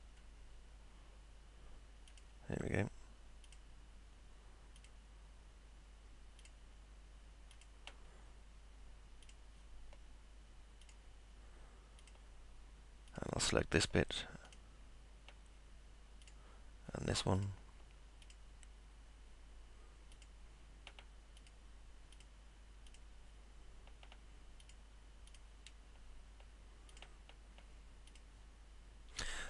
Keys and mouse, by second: 2.1 ctrl+click, 3.5 ctrl+click, 4.8 ctrl+click, 6.4 ctrl+click, 7.5 ctrl+click, 9.2 ctrl+click, 10.8 ctrl+click, 12.0 ctrl+click, 13.1 ctrl+click, 13.8 ctrl+click, 14.5 ctrl+click, 16.2 ctrl+click, 17.4 click, 18.2 click, 20.1 ctrl+click, 21.4 click, 22.1 click, 22.9 ctrl+click, 24.6 ctrl+click, 25.3 ctrl+click, 26.9 ctrl+click, 28.1 ctrl+click.